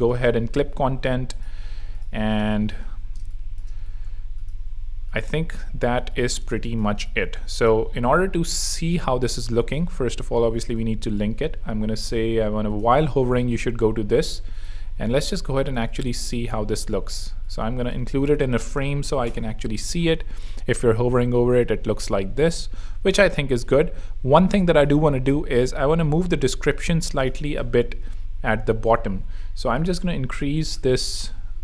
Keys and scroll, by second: 3.1 space, 3.8 z, 5.9 z, 6.4 alt+space, 7.3 space, 9.7 alt+shift+e, 15.8 space, 16.5 alt+super+g, 23.2 super+2, 25.4 shift+super+Down, 30.6-31.4 typing.